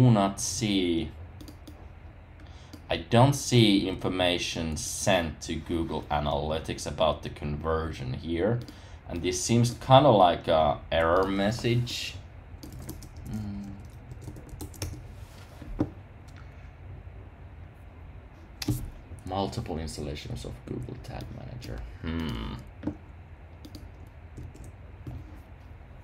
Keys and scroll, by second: 12.7 super+c, 13.0 super+t, 14.6 super+v, 14.7 Return, 24.3 super+w.